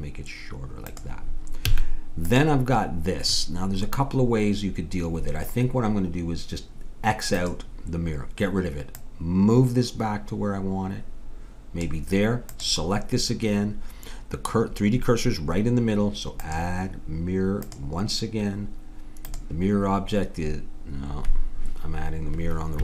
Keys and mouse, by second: 1.6 a, 2.3-4.0 drag, 7.3-10.7 drag, 12.5-14.3 drag, 16.4-19.1 drag, 19.3-21.2 drag.